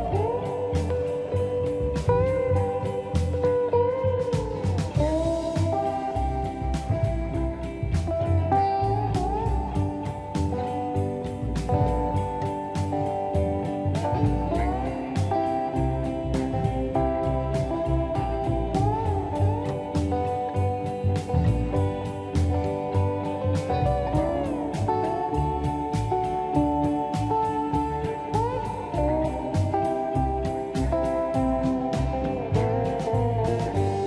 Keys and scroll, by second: 0.8 shift+r, 1.0 Escape, 1.0 space, 1.5 space, 1.7 Escape, 1.9 space, 6.5 Delete, 8.9 m, 19.1 /, 19.4 5, 19.5 Return, 21.7 space, 26.9 ctrl+z, 27.6 ctrl+y, 27.9 space, 29.4 shift+m, 31.9 shift+/, 32.1 5.